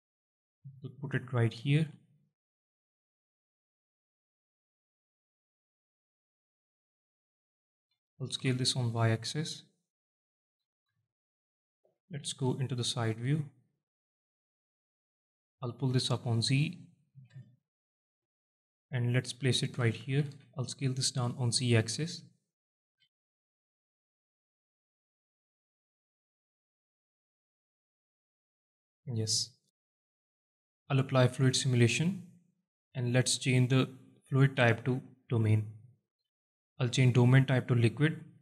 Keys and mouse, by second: 0.8 g, 1.7 click, 2.2 s, 2.9 click, 3.5 alt+shift+middle click, 4.2-7.5 drag, 7.9 s, 8.4 y, 9.7 click, 10.5 s, 10.9 y, 11.5 click, 12.3 KP_1, 15.3 click, 16.4 alt+shift+middle drag, 17.2 g, 19.5 shift+click, 20.1 s, 20.3 z, 22.1 click, 22.9 g, 23.2 z, 24.1 shift+click, 24.6 z, 25.3-25.6 alt+middle drag, 25.9 z, 26.6 KP_1, 27.5 KP_3, 28.5-29.0 alt+middle drag, 29.8 alt+shift+middle drag, 30.1-30.4 alt+middle drag, 30.6 alt+shift+middle drag, 31.4 click, 31.9 click, 32.9-35.5 drag, 36.9-38.1 drag.